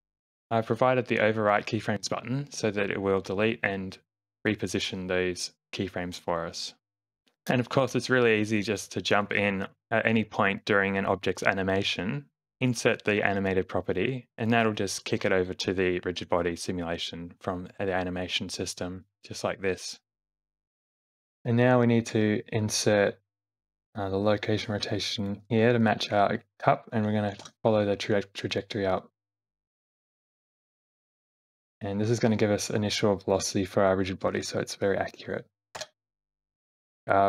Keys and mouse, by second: 7.2 g, 7.2 r, 7.4 shift+Left, 8.1 space, 9.5 space, 9.7 shift+Left, 10.0 space, 10.7 space, 10.9 click, 12.0 click, 12.7 click, 13.4 shift+Left, 14.3 click, 15.3 space, 16.7 space, 18.8 space, 19.0 shift+click, 20.0 shift+Left, 20.2 Right, 20.4 Right, 21.2 Left, 21.4 Right, 23.7 i, 26.1 Left, 27.4 g, 29.5 r, 30.8 g, 35.8 i, 37.0 Left, 37.0 Right.